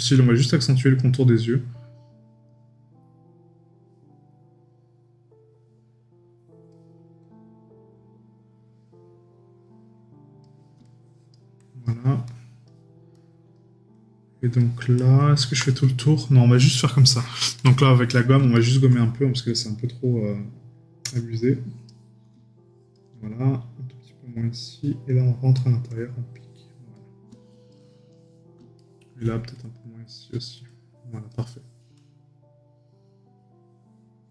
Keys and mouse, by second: 18.5 right click, 28.8 right click.